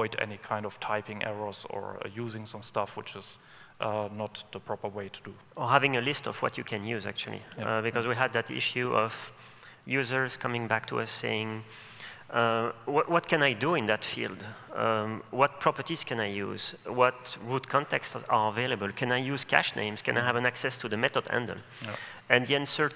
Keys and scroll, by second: 6.6 Escape, 11.5 super+o.